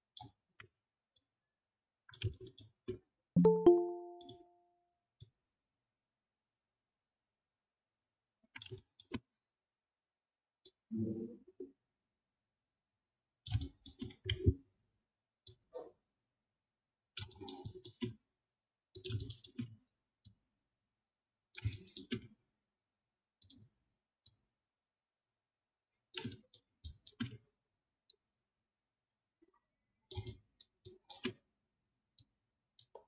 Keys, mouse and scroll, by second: 0.3-2.0 alt+scroll down 1.